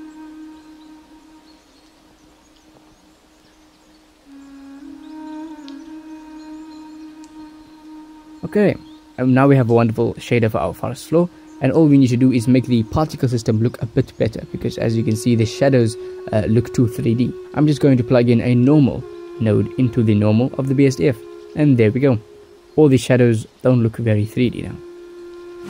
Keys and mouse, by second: 6.2 click, 6.4-10.0 drag, 10.5 ctrl+shift+click, 13.5 middle click, 14.1 middle click, 15.1 ctrl+s, 18.6 shift+a, 21.7-23.2 drag.